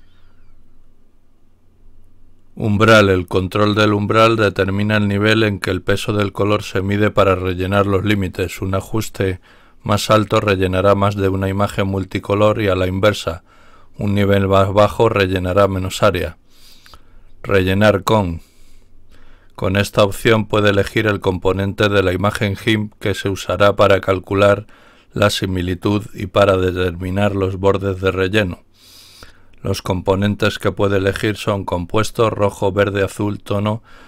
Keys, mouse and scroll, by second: 1.6-2.3 scroll down 2, 17.0-18.7 scroll down 4, 19.2-20.1 scroll down 2, 20.1-21.1 scroll down 1, 21.1 scroll down 1.